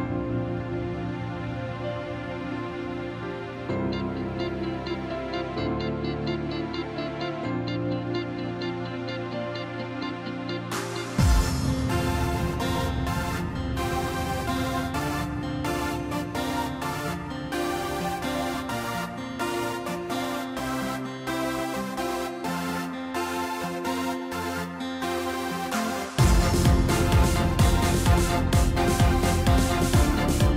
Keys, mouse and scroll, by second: 0.2 Tab, 1.4 Tab, 2.5 ctrl+r, 9.4 3, 9.8 click, 10.6 KP_3, 11.3-11.9 scroll down 2, 11.9 e, 14.5-15.5 middle drag, 15.5 2, 16.0 click, 17.0 KP_3, 17.8 g, 20.5 ctrl+r, 24.8 ctrl+r, 27.6-28.6 middle drag, 28.6 KP_1, 29.3-29.8 scroll up 1, 29.8 middle click.